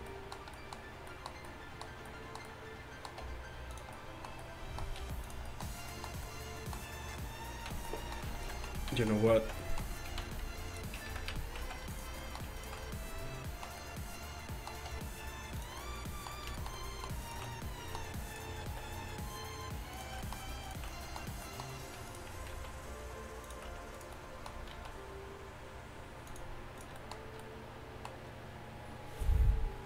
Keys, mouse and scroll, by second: 3.3 r, 5.1 g, 7.7-11.7 typing, 10.7 click, 11.7 right click, 12.5 middle click, 15.0 r, 18.7 alt+s, 20.4 middle click, 22.2 click, 22.6 alt+s, 24.8 alt+s.